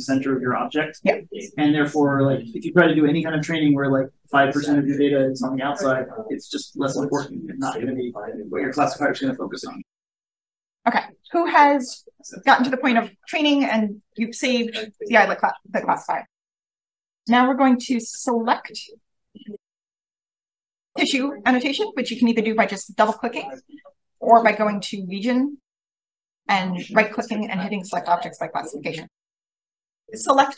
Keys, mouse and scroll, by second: 14.8 click, 24.1 click, 25.7 right click, 27.7 click.